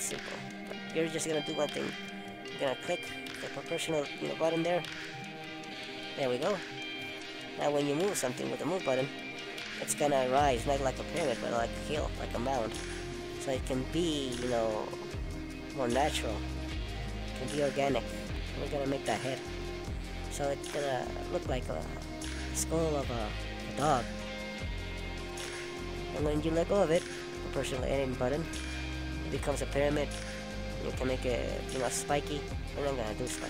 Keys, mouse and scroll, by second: 0.4 click, 1.1 middle click, 3.5 click, 4.7 middle click, 10.2 middle click, 11.4 click, 13.2 middle click, 17.1 click, 18.7 middle click, 19.9 click, 20.8 click, 22.0 middle click, 26.8 middle click, 28.3 ctrl+z, 29.7 click, 30.2 middle click, 31.4 middle click, 32.9 click.